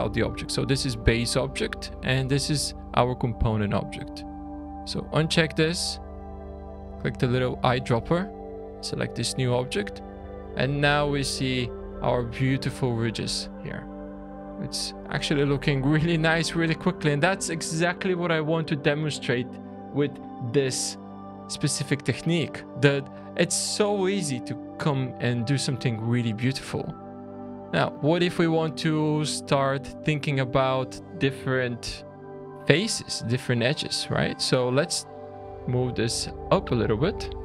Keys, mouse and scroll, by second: 1.6 scroll down 3, 4.4 click, 6.8 click, 9.6 scroll up 4, 10.2 shift+middle click, 10.7-11.2 typing, 14.2 Tab, 14.2 click, 14.2 scroll down 4, 14.7 click, 15.6-16.6 scroll down 2, 16.6 click, 27.3 click, 27.8 middle click, 28.4-29.4 scroll up 1, 29.4 scroll down 1, 29.6-29.9 scroll down 2, 29.9 Tab, 30.5 scroll up 3, 30.7 alt+a, 30.9 2, 31.5 alt+click, 32.4 shift+middle click, 34.6 a, 35.8 click, 36.8 alt+a, 37.1 2.